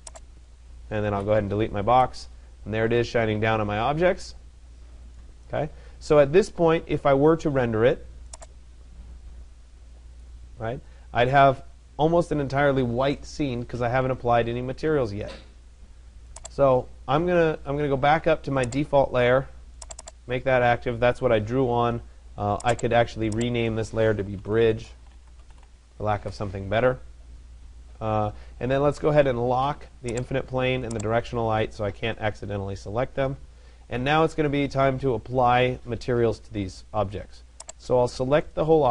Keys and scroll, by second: 0.7 Delete, 25.8 Return.